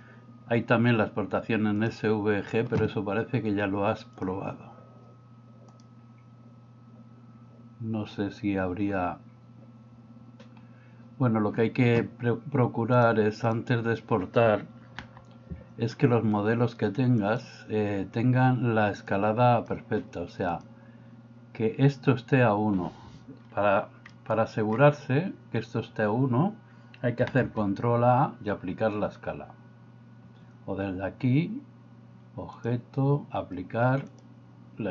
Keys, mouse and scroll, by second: 5.7-11.1 drag, 13.0 click, 15.0 n, 17.3 click, 19.2 click, 20.5 click, 24.2 middle click, 27.5 ctrl+a, 32.6-34.9 drag.